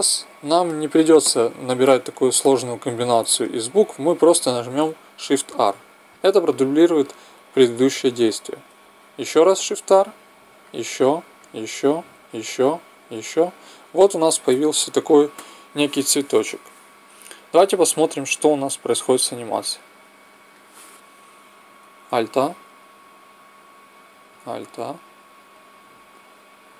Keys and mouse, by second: 16.1 middle click, 19.2-21.0 drag, 21.0 middle click.